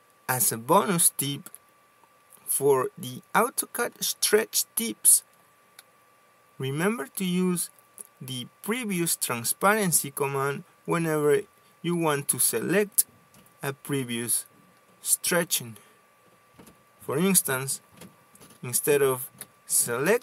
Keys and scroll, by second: 1.4 ctrl+z, 19.8 s.